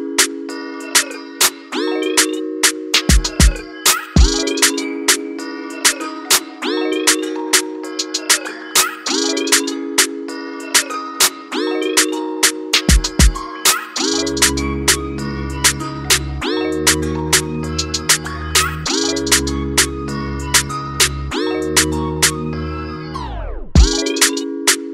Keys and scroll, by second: 8.0 ctrl+=, 9.0-10.1 typing, 11.3 [, 11.5 ], 11.5 ], 11.6 ], 15.5 [, 15.6 [.